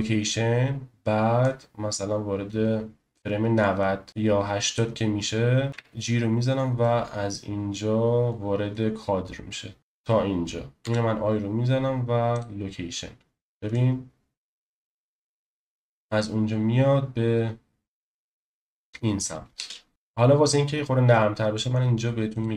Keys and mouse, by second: 1.4-4.7 drag, 5.7 g, 10.8 i, 13.7-14.9 drag, 15.5 space, 19.5 space.